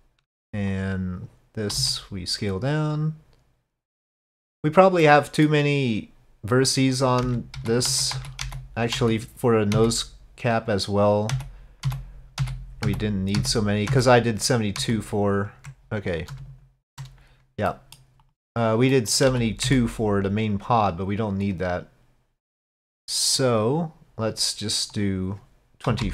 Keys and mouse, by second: 0.3 Tab, 0.7 click, 1.8 s, 5.1 middle click, 7.3 ctrl+z, 7.6 ctrl+z, 7.9 ctrl+z, 8.2 ctrl+z, 8.5 ctrl+z, 9.0 ctrl+z, 9.8 ctrl+z, 11.4 ctrl+z, 11.9 ctrl+z, 12.4 ctrl+z, 12.9 ctrl+z, 13.4 ctrl+z, 13.9 ctrl+z, 14.8 ctrl+z, 17.7 middle drag, 18.3 click, 19.0 middle click, 19.3 z, 21.5-23.5 drag, 24.9-26.1 drag.